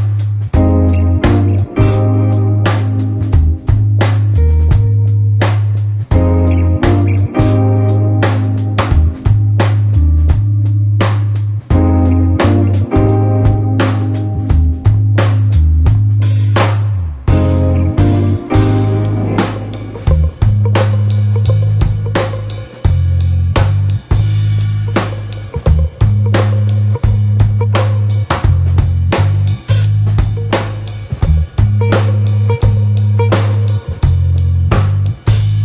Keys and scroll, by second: 4.9 shift+super+i, 7.8 v, 14.4 ⟲, 19.3 super+=, 20.7 alt+super+0, 21.3 alt+super+space, 21.8 super+space, 30.7 super+-.